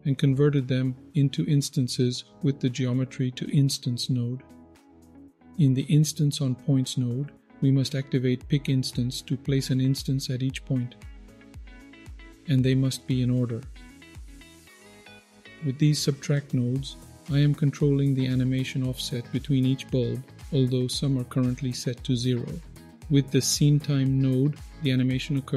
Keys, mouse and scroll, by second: 0.8-1.6 scroll up 2, 1.6-3.2 scroll down 6, 2.7-3.2 middle drag, 3.5-5.1 scroll up 4, 5.1-5.5 scroll down 4, 5.3 middle click, 6.0-6.7 scroll up 5, 8.4-9.8 scroll up 1, 11.2-11.7 scroll down 3, 11.6 middle click, 12.1-14.0 scroll up 5, 14.0-14.9 scroll down 6, 14.7 middle click, 15.3 middle click, 15.8-17.2 scroll up 1, 17.2-19.2 scroll up 6, 20.8-22.0 middle drag.